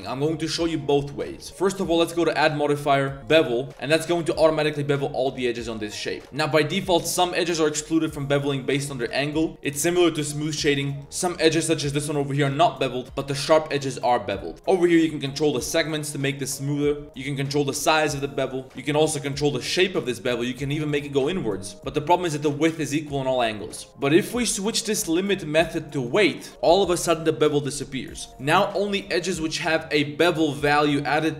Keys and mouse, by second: 1.9-3.3 drag, 4.2-6.1 drag, 6.2 z, 6.3 Tab, 6.7 z, 8.1 Tab, 8.8 click, 9.3 shift+drag, 9.5 Tab, 10.0 click, 10.4 click, 10.9 click, 11.2 shift+click, 11.4 shift+middle click, 11.8 g, 13.0 2, 13.2 alt+click, 13.7 Tab, 14.9 click, 15.7 click, 17.0-18.2 drag, 18.6-23.5 drag, 24.9-26.1 drag, 28.3 middle click.